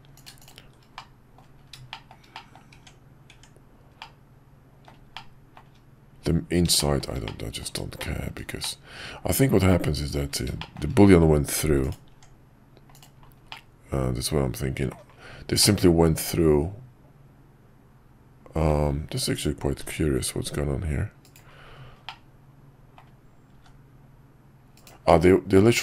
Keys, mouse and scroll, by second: 0.1 click, 0.4 shift+click, 1.0 middle click, 1.9 shift+middle click, 2.3 middle click, 2.7 Tab, 4.0-4.9 middle drag, 5.1-5.6 shift+middle drag, 6.7 shift+middle drag, 7.2-7.6 middle drag, 8.0 shift+middle drag, 8.6-10.1 middle drag, 10.6 shift+middle click, 11.9 click, 12.1 Tab, 12.9 click, 13.5-14.9 middle drag, 15.6-18.7 middle drag, 19.8 g, 22.0 middle click, 23.6 g, 25.0-25.8 middle drag.